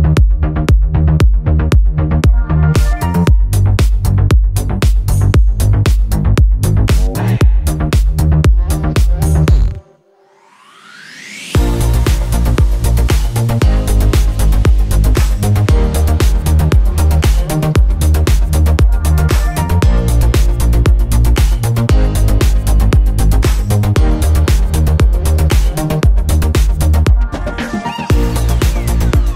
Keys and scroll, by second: 14.1 Return, 16.3 ctrl+=, 16.6 ctrl+-, 20.0 F9, 25.8 Return, 27.5 g.